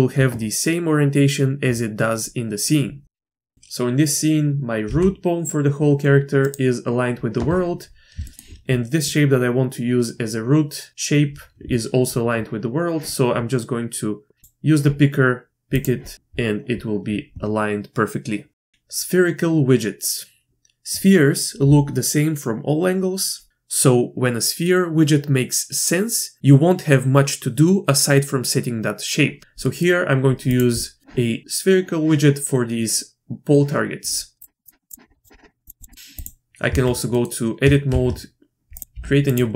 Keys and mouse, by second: 3.3 shift+click, 3.5 click, 3.5 ctrl+p, 3.5 Tab, 4.8 g, 8.2 shift+click, 14.4-15.8 drag, 18.6 shift+click, 29.6 middle click, 30.5-31.0 drag, 35.2 click, 35.9 click, 36.1 click, 36.6 Tab, 37.1 click, 37.9 shift+a, 38.8 click, 38.8 g, 38.9 g.